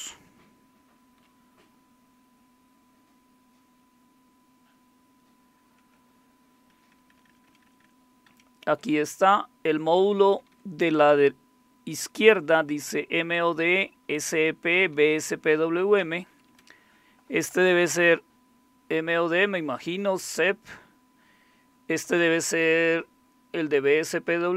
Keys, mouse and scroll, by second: 0.0-1.0 Down, 5.7 Up, 6.7 Up, 6.9 Up, 7.1 Up, 7.3 Up, 7.4 Up, 7.7 Up, 7.8 Up, 8.3 Up, 8.9-10.0 Right, 10.3 Right, 11.0 Right, 12.4 Right, 12.8 Right, 13.0 Right, 13.2 Right, 14.1 Right, 14.4 Right, 14.4 Right, 14.7 Right, 15.1 Right, 16.3 Left, 16.5 Left.